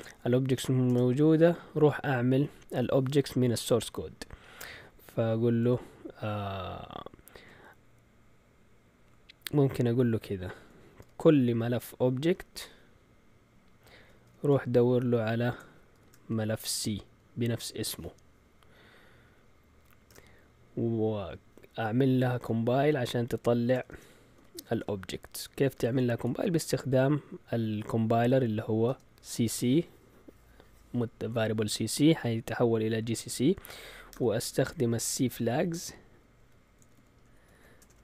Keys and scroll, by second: 0.5 Return, 0.8 typing, 11.6-12.8 typing, 14.2 typing, 15.7-17.1 typing, 20.0 Return, 22.4 %, 23.9-26.7 typing, 28.8 space, 35.3-38.0 typing.